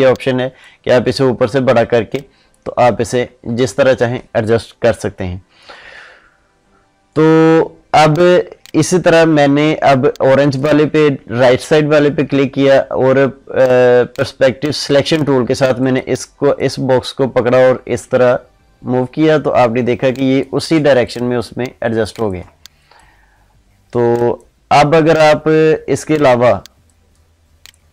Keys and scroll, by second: 3.4 ctrl+z, 20.8 ctrl+space.